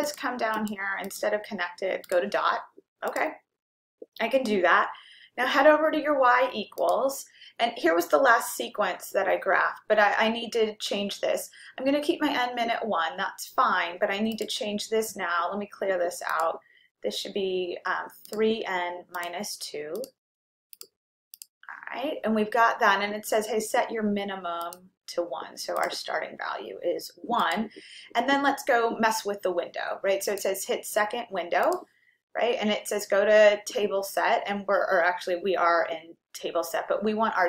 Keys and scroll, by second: 0.1 Down, 1.1 Down, 2.1 Right, 3.1 Return, 14.5 Down, 16.5 Up, 19.4 3, 21.0 -, 21.6 2, 24.7-37.4 Down, 26.0 Right, 27.6 1.